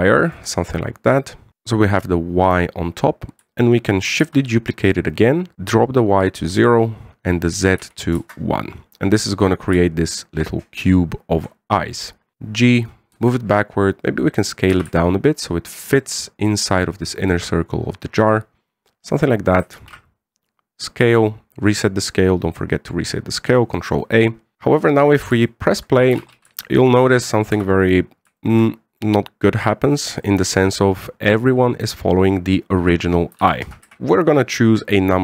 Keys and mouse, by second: 5.1 shift+d, 5.5-9.9 drag, 10.5-12.2 shift+drag, 12.3 g, 13.9 s, 15.5 g, 19.6-20.3 middle drag, 20.5 ctrl+a, 21.6-22.0 middle drag, 23.3-24.3 middle drag, 25.0 KP_1, 26.2 shift+middle drag, 26.9 alt+a, 27.3 shift+middle drag, 28.3 z, 29.1 shift+middle drag, 29.4-29.7 middle drag, 31.0 shift+middle drag, 33.9 KP_2, 33.9 KP_1, 34.6 z.